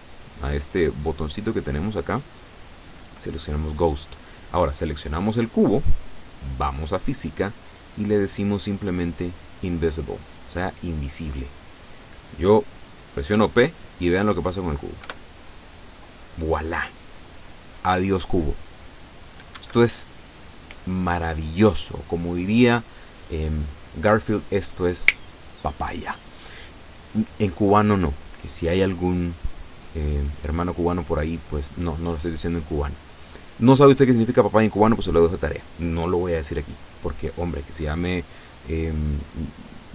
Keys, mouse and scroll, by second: 4.5 right click, 10.3 click, 15.1 p, 19.7 Escape, 30.2-30.5 scroll down 1, 37.0-37.3 scroll up 2, 37.8 scroll down 2.